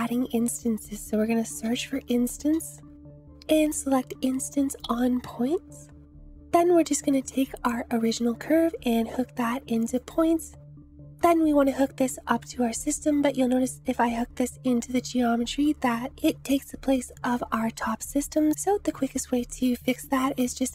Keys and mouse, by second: 3.3 BackSpace, 7.1-10.0 drag, 11.6-14.9 drag, 17.1 click, 18.2 click, 19.1 shift+a.